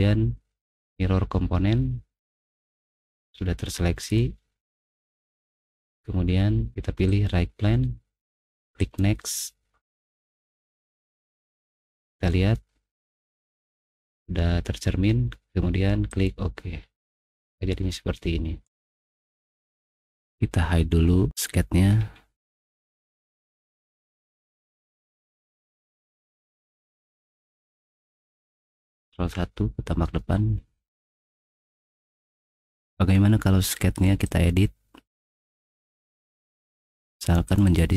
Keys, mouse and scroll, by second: 0.8 click, 4.0 click, 5.4 click, 7.1 click, 8.8 click, 10.5 middle click, 11.2 middle click, 11.2-12.5 scroll down 3, 11.8 middle click, 12.2 middle click, 12.6 middle click, 16.1 click, 17.4 middle click, 17.4 scroll down 2, 17.6 middle click, 19.3 middle click, 19.8 middle click, 20.3 click, 21.9 middle click, 21.9-22.5 scroll up 3, 22.4 middle click, 23.1 middle click, 23.1 scroll up 2, 23.3 middle click, 23.8 click, 24.2 click, 25.4 right click, 26.6 right click, 26.7 click, 29.1 ctrl+1, 31.2 middle click, 31.2-32.2 scroll up 3, 31.6 middle click, 32.1 middle click, 34.2 click, 36.3 click, 36.7 middle click, 37.5 click, 37.6 click.